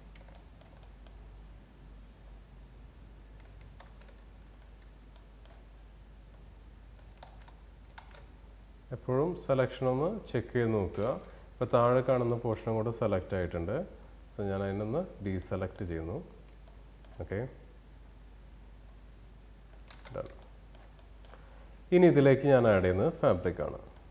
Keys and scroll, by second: 3.2 ctrl+z, 6.6 ctrl+z, 10.4 ctrl+z, 19.3 ctrl+z.